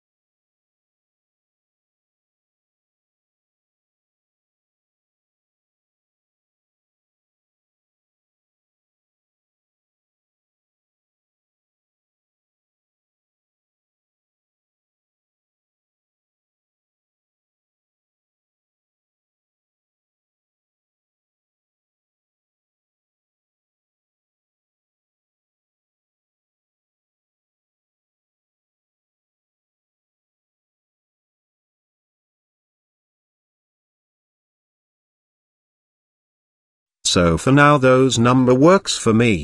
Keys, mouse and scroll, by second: 1.8 click, 3.5-5.0 drag, 6.1 shift+middle drag, 7.8-13.1 drag, 16.8-18.6 drag, 19.3 z, 21.2 z, 23.8-26.4 drag, 26.9-28.4 middle drag, 29.7-32.6 drag, 33.3-33.9 middle drag, 34.5-36.0 drag, 37.8-39.4 middle drag.